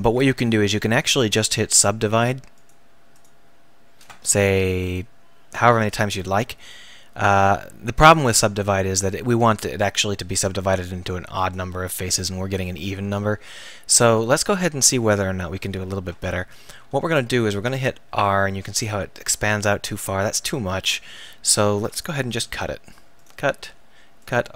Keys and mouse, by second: 2.6-10.5 drag, 11.4 click, 13.1 ctrl+z, 13.3 ctrl+z, 14.0 ctrl+z, 17.1 ctrl+r, 20.0-22.3 right drag, 22.3 k.